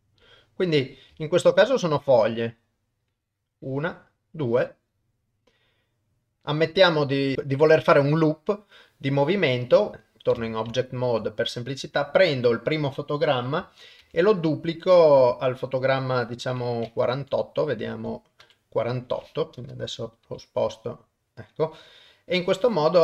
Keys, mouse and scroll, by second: 0.5 middle click, 1.2 shift+middle click, 1.6 middle click, 3.1-6.4 drag, 6.9 middle click, 9.9 ctrl+Tab, 10.5 ctrl+middle click, 10.8 shift+middle click, 11.9 click, 14.0 shift+d, 16.2-16.8 drag, 17.1 Up, 17.9 Right, 18.4 Up, 20.3 g, 22.3-23.0 drag.